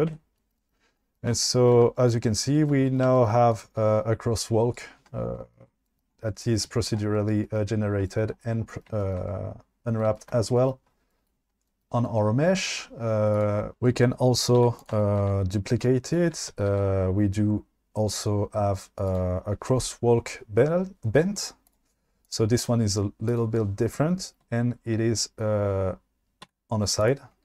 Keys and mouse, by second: 0.1 Tab, 4.7 click, 13.3 click, 13.7 Tab, 14.6 2, 16.9 shift+d, 19.1 click, 21.7 drag, 22.3 click, 26.5 1.